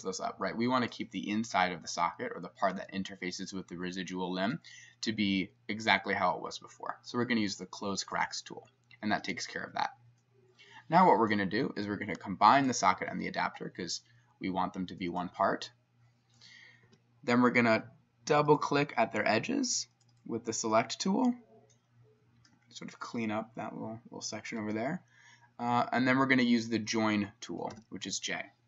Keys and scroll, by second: 16.9 s, 27.8 j.